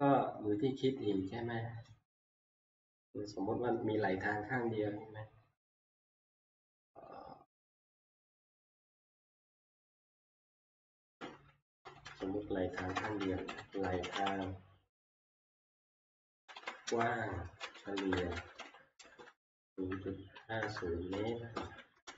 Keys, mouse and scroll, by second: 10.3 F2, 11.4-15.5 typing, 17.4-22.1 typing.